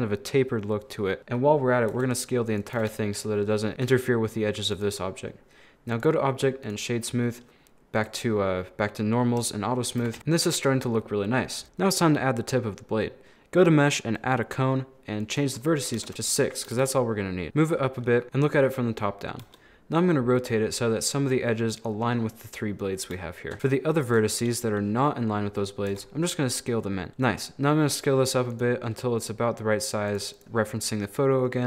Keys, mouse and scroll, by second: 1.2-1.9 scroll up 4, 1.9 s, 2.8 a, 2.9 a, 3.0-4.7 middle drag, 4.7 right click, 5.9-7.1 drag, 7.1-7.9 scroll down 4, 7.9 click, 9.3 click, 10.0 a, 10.2-11.6 middle drag, 11.6 shift+a, 15.2-16.7 drag, 16.7 g, 18.0 middle click, 18.2 scroll up 2, 19.5 r, 23.2 shift+middle click, 23.5 shift+right click, 23.9 shift+right click, 25.9 s, 28.8 scroll down 2, 28.9-30.4 middle drag.